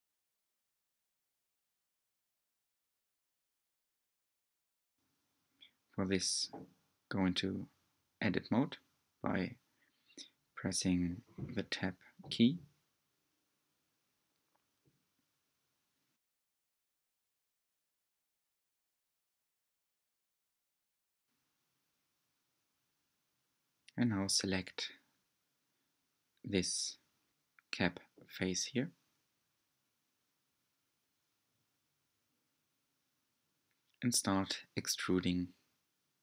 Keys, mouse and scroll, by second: 0.8 g, 2.7 s, 8.5 s, 11.6 g, 13.9-14.7 scroll up 4, 14.8-16.1 shift+middle drag, 16.1-17.8 scroll up 3, 18.5 Tab, 20.1 3, 20.8-21.9 drag, 24.2 click, 24.8 3, 25.7-27.7 drag, 27.7-29.8 middle drag, 29.8 click, 30.4-32.3 middle drag, 32.3 click, 34.1 e, 36.0 s.